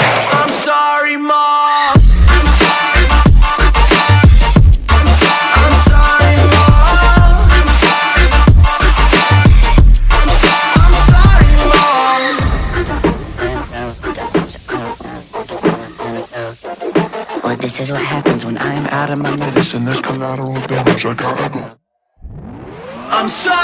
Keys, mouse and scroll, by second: 1.3 ctrl+alt+scroll down 1, 1.5 ctrl+space, 1.6 click, 2.7 click, 4.5 ctrl+z, 4.7 click, 6.6 ctrl+alt+scroll up 1, 7.4 click, 8.5 shift+click, 10.7 x, 11.3 ctrl+alt+scroll down 1, 11.9 ctrl+a, 13.4 ctrl+0, 15.0 click, 16.5-18.0 alt+shift+drag, 21.5-23.6 drag.